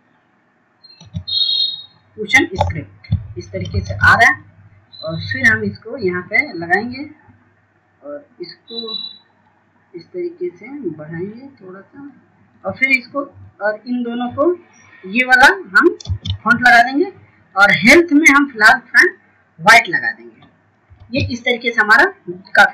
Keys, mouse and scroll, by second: 0.5 click, 2.2 typing, 4.1 $, 7.0 ctrl+space, 8.4-10.5 drag, 10.5 scroll up 1, 12.7-18.1 drag, 19.4 ctrl+space, 20.9-22.7 drag.